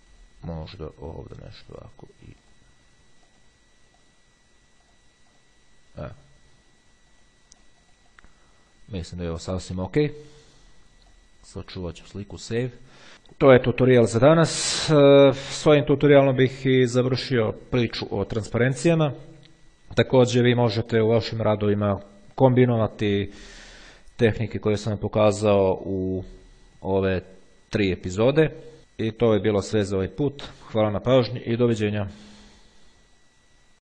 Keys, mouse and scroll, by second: 0.0 click, 1.4 click, 2.7 click, 3.6 click, 5.1-6.2 drag, 7.4-9.0 drag, 11.2 click, 12.4 click.